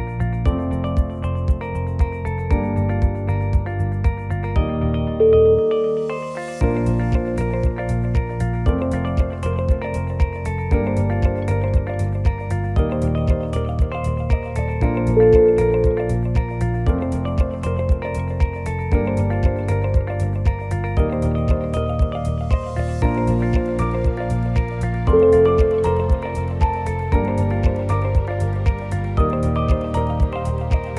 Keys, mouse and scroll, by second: 0.0 middle click, 0.6 click, 1.2 g, 2.4 middle click, 3.3-3.8 scroll up 2, 3.8 2, 4.1 middle click, 4.6 middle click, 5.2 click, 6.1 shift+click, 7.8 shift+click, 8.3 scroll down 2, 8.5 middle click, 8.7 middle click, 8.9 o, 9.1 middle click, 9.5-9.8 scroll up 2, 9.9 g, 15.5 middle click, 16.4 scroll up 1, 16.7 shift+middle click, 16.8 shift+middle click, 17.1 middle click, 17.2 middle click, 17.8 click, 18.7 alt+click, 19.1-19.9 scroll down 2, 19.9 scroll down 1, 19.9 c, 22.1 middle click, 22.4 middle click, 22.7 shift+click, 24.9 middle click, 24.9-25.2 scroll up 2, 25.2 shift+middle click, 25.9 e, 27.3 middle click, 27.7 shift+middle click, 28.6 alt+click.